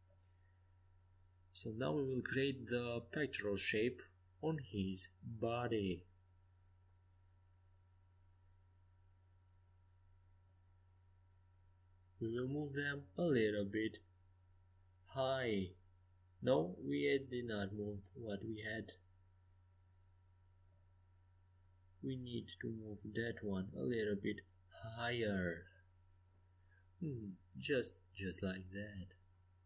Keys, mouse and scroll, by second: 3.5-5.4 right drag, 5.4-7.5 drag, 6.5-7.5 right drag, 7.5 g, 7.6 right click, 10.2 g, 14.5 g, 18.2 ctrl+z, 23.7-25.4 right drag, 25.2 f, 26.9 g.